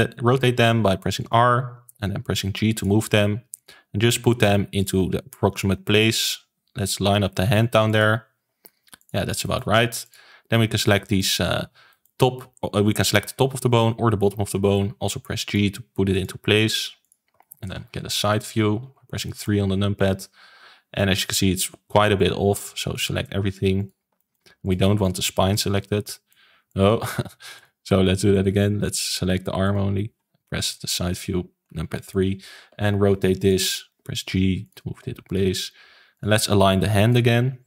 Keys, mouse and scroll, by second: 1.5 g, 3.0 r, 3.7 g, 5.6 g, 8.3 g, 9.3 shift+middle click, 9.9 click, 10.5-10.8 scroll up 1, 10.8 shift+middle click, 11.4-11.8 scroll up 1, 11.8-14.8 shift+middle drag, 14.8 g, 16.0 click, 16.3 g, 17.3 shift+middle click, 18.0 KP_3, 18.8-19.2 scroll down 2, 19.2 shift+middle click, 19.6-21.0 scroll up 1, 21.0-21.4 scroll down 1, 22.1 click, 23.7 shift+click, 24.1 shift+middle click, 24.5 shift+click, 24.9 shift+click, 25.3-26.6 middle drag, 26.6 shift+click, 27.5 click, 27.8 middle click, 28.2 click, 29.6 shift+click, 30.8 KP_3, 31.5-31.9 scroll up 1, 31.9 shift+middle click, 32.6 r, 33.9 g, 34.9 r, 35.4 g, 36.3 r, 37.2 g.